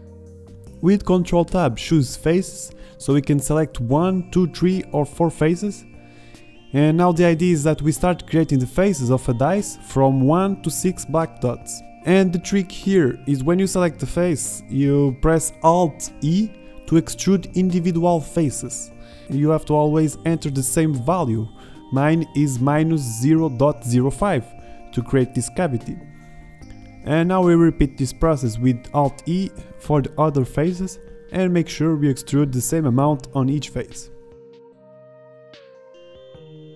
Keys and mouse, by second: 1.6-2.9 drag, 2.9 ctrl+Tab, 4.2-6.2 drag, 6.2-9.6 middle drag, 9.6 alt+e, 25.3 middle click, 26.0 middle click, 26.4-28.4 drag, 27.6 alt+e, 29.4 middle click, 30.2 alt+e, 31.0 middle click, 31.7 alt+e, 32.7 click, 33.1 middle click, 33.2 alt+e, 33.9 middle click, 34.2 middle click, 34.6 click, 34.9 z, 35.2 middle click, 35.7 ctrl+z, 36.4 ctrl+z.